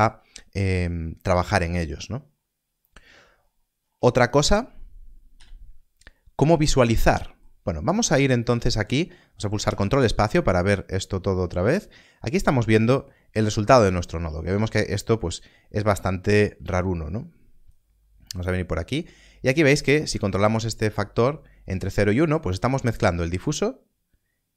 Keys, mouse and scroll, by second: 1.5 scroll down 1, 3.3 scroll up 1, 5.3 x, 9.1 x, 9.5 ctrl+space, 11.1 scroll up 1, 12.1-12.5 scroll down 1, 13.3-13.7 scroll up 1, 15.8 scroll up 1, 17.7 click, 20.3 shift+click.